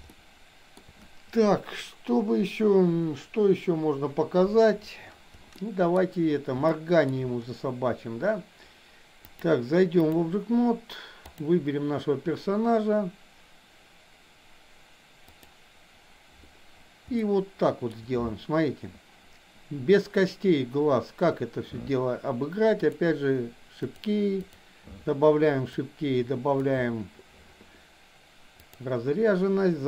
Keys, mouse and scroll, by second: 0.1-0.7 shift+middle drag, 5.5-5.9 shift+middle drag, 6.7-7.1 shift+middle drag, 9.4 click, 11.4 click, 15.4 click, 17.2-17.9 shift+middle drag, 22.9 click, 23.9 click, 24.4 click, 25.6-26.6 drag, 28.6-29.8 drag.